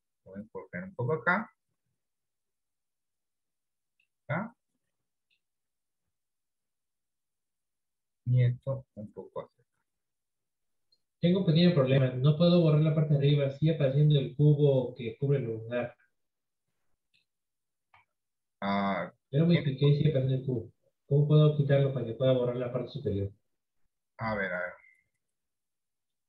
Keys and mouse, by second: 4.6-5.9 middle drag, 6.4 KP_3, 9.0-12.1 drag, 13.1-14.8 drag, 15.7 Tab, 16.4-17.5 middle drag, 18.1 Tab, 22.2 click, 22.9-23.9 middle drag.